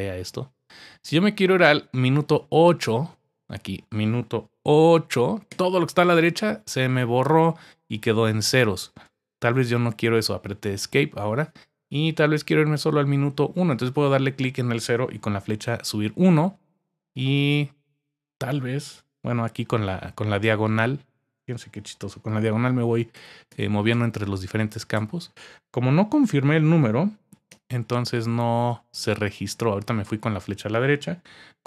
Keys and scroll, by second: 5.5 8, 9.3 Home, 15.6 Up, 19.8 typing, 22.3-23.9 typing, 27.5 typing.